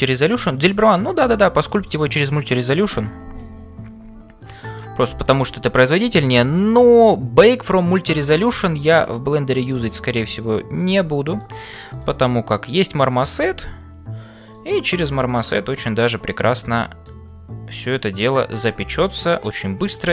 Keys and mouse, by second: 1.3 click, 1.8-2.9 middle drag, 5.3 click, 7.9 click, 8.5 f, 9.0 middle click, 10.8 g, 11.9 click, 13.5 f, 15.1-17.2 middle drag, 19.8 click.